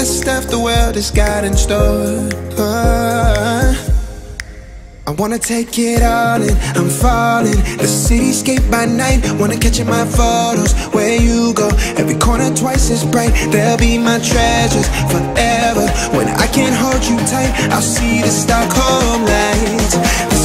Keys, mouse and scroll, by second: 0.0-0.3 typing, 0.8-1.2 scroll up 1, 1.2 click, 2.3-2.6 scroll up 1, 2.6 a, 3.0 click, 6.0 space, 7.2-8.8 typing, 9.7 click, 13.0-13.9 typing, 15.3 r, 16.3 scroll up 1, 17.5 scroll down 1, 19.4 click, 19.5 space, 19.9 e, 20.2 click.